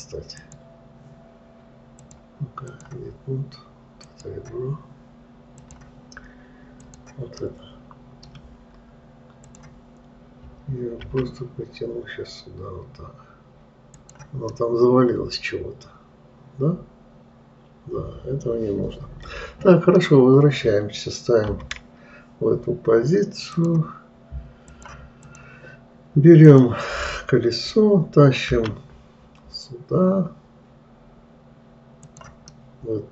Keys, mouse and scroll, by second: 0.8 click, 2.4-4.7 drag, 6.0-7.4 drag, 7.9-9.9 middle drag, 9.9-11.5 drag, 11.5 g, 14.9-17.9 middle drag, 22.0 KP_3, 23.9 click, 25.1-27.0 drag, 29.0 g, 33.0-33.1 middle drag.